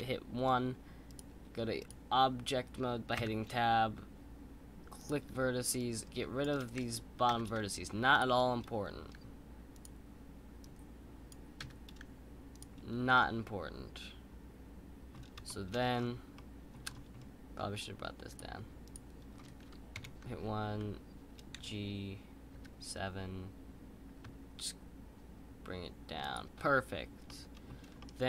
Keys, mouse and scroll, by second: 1.1 click, 1.8 click, 3.2 3, 5.8 click, 10.6 click, 13.1-15.8 middle drag, 15.8-16.3 scroll up 4, 16.3 middle click, 16.8-17.5 scroll down 4, 17.5-18.3 scroll up 1, 18.9-19.9 drag, 19.9 KP_1, 21.6 g, 27.2-28.2 middle drag.